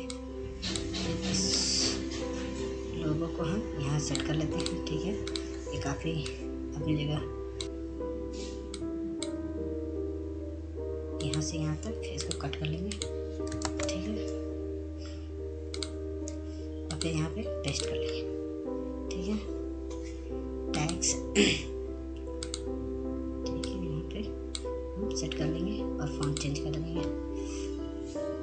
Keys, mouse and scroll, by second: 0.7-7.6 drag, 9.9 scroll up 1, 11.6 click, 12.8 scroll down 1, 14.1 shift+click, 16.5 ctrl+space, 17.0 scroll down 1, 18.0 scroll, 18.6 scroll up 1, 18.6 click, 23.7-28.2 drag, 28.2 scroll up 1.